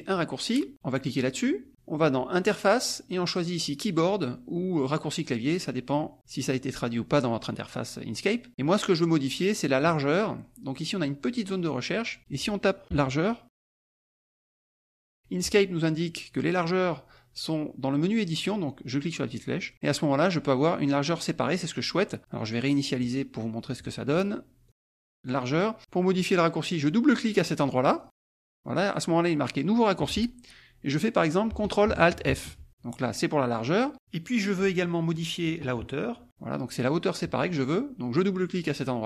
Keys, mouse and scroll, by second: 1.3 click, 2.3 click, 3.7 click, 8.5 click, 9.8 click, 11.9 click, 12.8 a, 13.6 g, 14.4 e, 14.8 r, 19.2 click, 23.0 click, 24.6 click, 25.4 click, 27.8 click, 32.2 ctrl+alt+f, 34.0-35.2 drag, 35.4-36.5 typing.